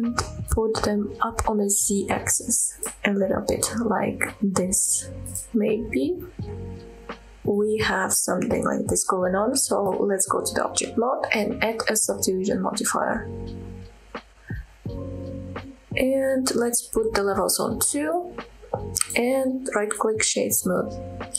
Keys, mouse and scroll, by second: 2.8-3.4 scroll down 4, 3.6-5.2 scroll up 5, 5.2 click, 5.7 scroll down 1, 5.9-7.7 middle drag, 7.9 middle click, 8.7-9.3 scroll up 2, 9.9 Tab, 10.2-10.8 scroll down 1, 11.3-13.2 drag, 13.5 scroll up 2, 13.8-14.6 middle drag, 14.9-15.3 middle drag, 15.9 scroll up 2, 18.1 click, 18.6-19.1 middle drag, 19.2-20.1 right drag, 20.3-20.7 scroll down 2, 20.7 middle click.